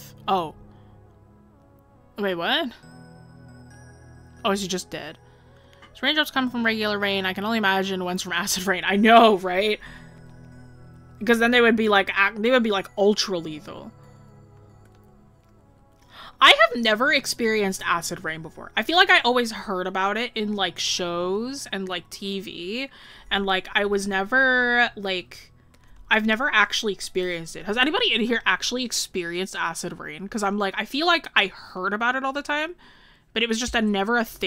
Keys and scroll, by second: 26.0 scroll.